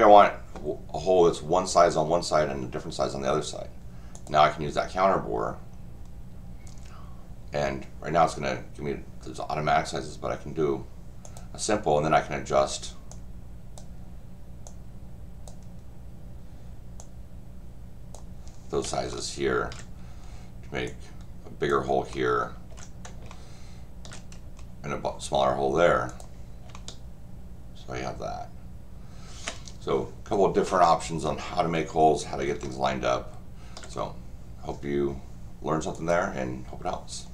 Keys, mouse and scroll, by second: 4.1 click, 11.2 click, 13.1 click, 14.6 click, 17.0-18.1 drag, 19.1 shift+middle click, 20.9 click, 22.1 shift+middle click, 23.3 shift+middle click, 26.1 click, 26.7-29.4 shift+middle drag, 31.2 scroll up 2, 32.6-33.8 shift+middle drag, 35.9 click.